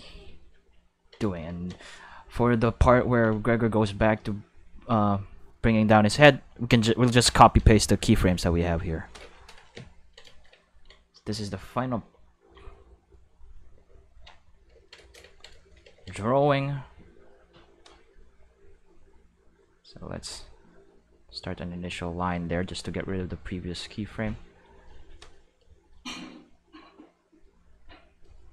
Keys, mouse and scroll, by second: 5.0-6.1 drag, 6.7-7.2 drag, 12.1 ctrl+middle click, 15.0 shift+middle click, 16.0 ctrl+middle click, 19.6 click, 21.1-22.2 drag, 23.2-24.6 drag, 25.0 shift+middle click, 26.1 click, 26.6-28.2 drag.